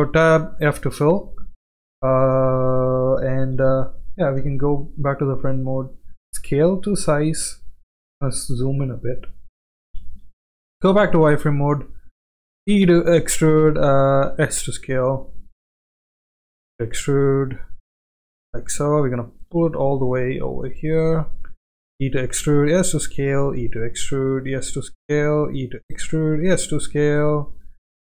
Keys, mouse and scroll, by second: 0.3 f, 4.4 KP_1, 5.7 s, 9.6 shift+middle click, 10.1 z, 12.7 e, 14.3 s, 16.6 e, 19.1 shift+middle click, 19.8 g, 21.9-26.4 typing.